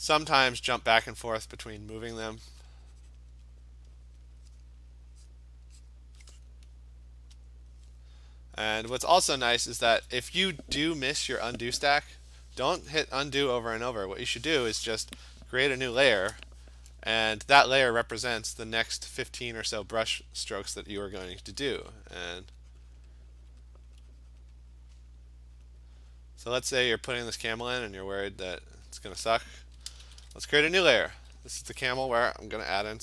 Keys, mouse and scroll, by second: 0.5 click, 1.5 click, 2.2 Return, 3.2 click, 3.7 click, 4.2 click, 5.1 click, 5.3 click, 5.9 click, 6.4 click, 7.5 click, 9.0 click, 9.9 Return, 15.7 ctrl+shift+n, 16.2 Return, 18.5 click, 20.0 click, 20.2 click, 20.4 click, 21.4 [, 21.6 [, 21.8 [, 22.3 click, 22.5 click, 22.8 click, 23.0 click, 23.3 click, 23.6 click, 23.9 click, 24.4 click, 25.0 click, 25.7 click, 26.4 click, 28.9 click, 30.1 ctrl+shift+n, 30.5 Return.